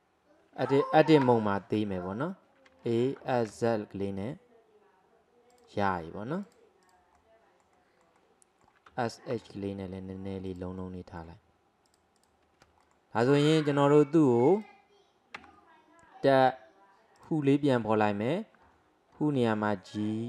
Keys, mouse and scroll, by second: 1.3 Tab, 2.7 a, 3.2 s, 6.5 click, 7.2-8.9 middle drag, 8.9 s, 10.8-11.9 middle drag, 11.9-12.9 drag, 12.9 alt+middle click, 13.2 alt+middle click, 14.6 click, 15.4 Tab, 17.2 click, 17.9-19.4 scroll down 2, 19.4 g.